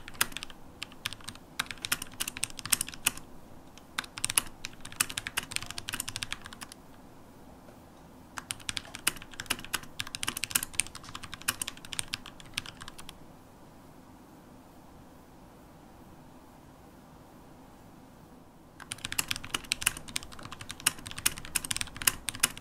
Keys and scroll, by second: 1.7 shift+super+p, 2.3 shift+super+p, 3.3 super+`, 5.0 BackSpace, 6.7-8.4 typing, 8.7 super+BackSpace, 18.2 Return, 18.2-21.0 typing.